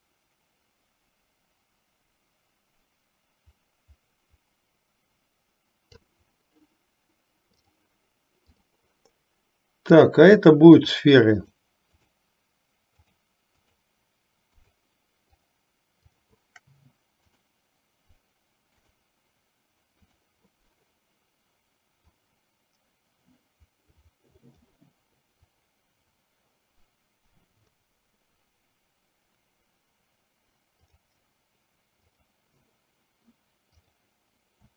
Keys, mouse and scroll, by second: 8.6 click, 10.9 shift+click, 12.1 shift+click, 13.1 shift+click, 14.7 shift+click, 15.5 shift+click, 16.2 shift+click, 17.3-19.1 drag, 20.1 click, 22.1-24.8 drag, 25.5-27.9 drag, 31.0 click, 32.1 click, 34.0 click.